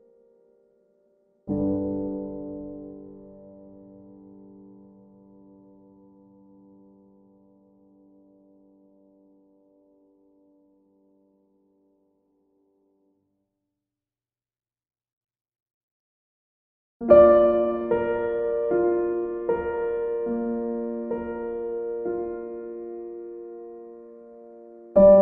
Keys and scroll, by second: 5.1 p, 6.1 p, 22.7 ctrl+z.